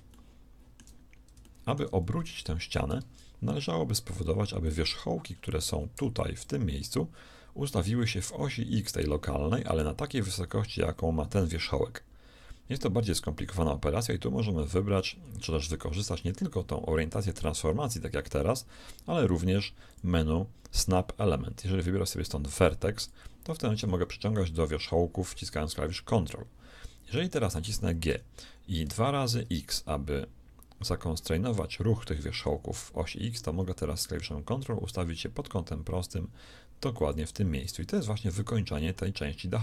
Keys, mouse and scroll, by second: 3.0 ctrl+Tab, 5.6 a, 5.9 b, 23.7 g, 28.0 g, 38.3 z.